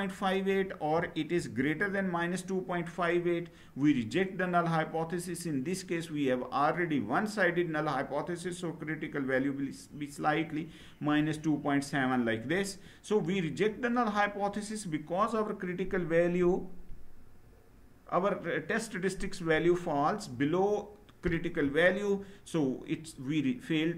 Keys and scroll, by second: 1.0 Right.